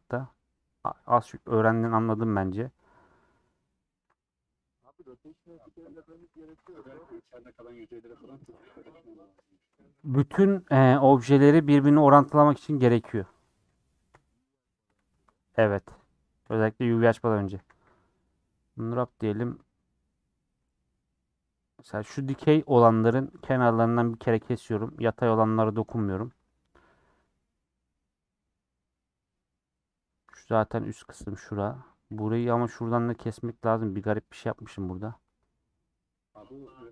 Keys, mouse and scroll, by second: 0.0 click, 0.5 middle click, 1.2 click, 1.8 /, 2.1-3.9 middle drag, 3.9 Tab, 4.1-6.4 middle drag, 6.4 2, 6.7 alt+click, 7.6-8.9 middle drag, 8.9 scroll down 2, 9.0 middle click, 9.6 scroll up 2, 10.1 3, 11.0 middle click, 11.8 ;, 12.4 middle click, 13.0 3, 14.1 l, 16.4 ;, 16.9 middle click, 17.5 a, 18.2 u, 18.6 middle click, 18.7-19.6 scroll down 1, 19.6 middle click, 20.5 2, 20.7 middle click, 21.6 scroll up 1, 21.8 middle click, 22.7 click, 24.1-25.8 middle drag, 25.8 a, 26.1 u, 27.7-32.3 middle drag, 32.3 2, 32.8 middle click, 35.5-36.9 middle drag.